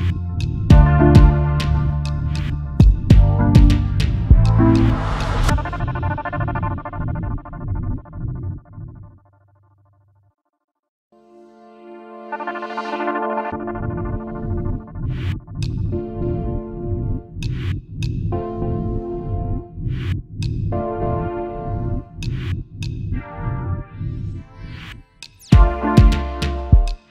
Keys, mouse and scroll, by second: 1.9 ctrl+c, 3.5 alt+shift+click, 6.3-6.9 alt+scroll down 1, 8.8-9.7 alt+scroll up 1, 10.7-11.1 alt+scroll up 1, 11.8 alt+shift+click, 13.3-14.3 alt+scroll down 1, 18.5-20.1 alt+scroll down 1, 20.6 double click, 21.1 alt+scroll up 1, 23.9-24.5 alt+scroll up 1, 25.4 alt+scroll down 1, 26.6 alt+scroll down 1.